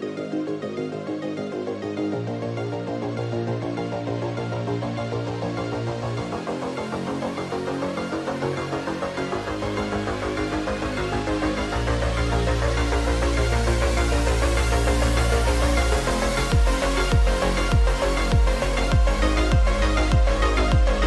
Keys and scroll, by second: 0.0-0.1 typing, 0.7 Return, 4.8-5.6 typing.